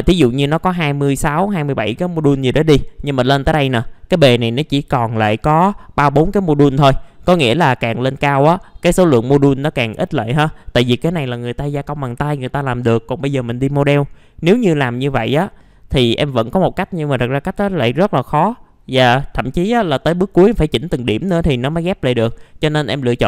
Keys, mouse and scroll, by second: 3.7 scroll up 1, 7.1 scroll down 1, 13.3 middle click, 20.2-22.3 scroll up 1, 22.3-22.9 scroll down 1, 22.9 middle click.